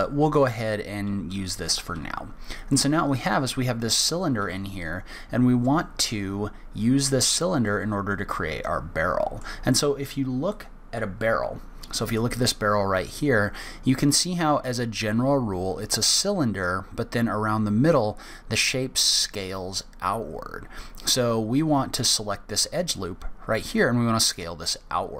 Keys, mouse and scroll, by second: 1.4-2.5 scroll up 1, 7.7 middle click.